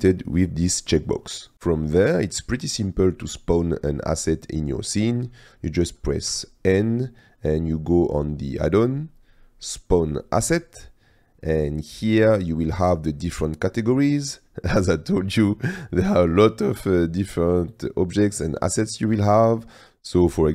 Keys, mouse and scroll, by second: 6.2 n, 10.1-20.5 drag.